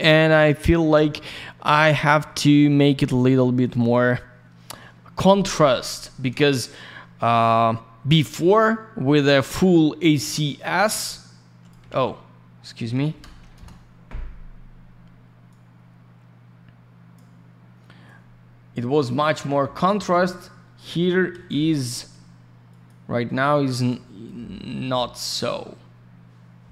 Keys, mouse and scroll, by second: 0.3-1.1 scroll down 1, 2.2 scroll down 1, 2.6 middle click, 3.2-3.6 scroll up 1, 3.6 click, 3.7 click, 3.7 click, 3.9 double click, 9.3 click, 9.3 click, 10.5 click, 11.8 ctrl+я, 12.9 1, 13.5 Return, 15.4 click, 18.0 click, 21.3 ctrl+я, 22.6 click, 22.8 click, 23.4 click, 24.2 click.